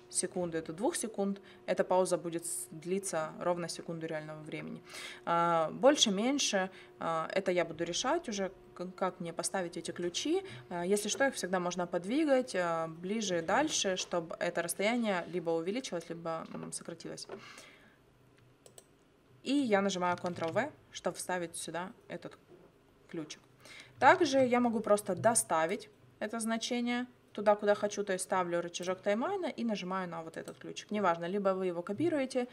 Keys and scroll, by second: 20.4 ctrl+v, 24.2 ctrl+z.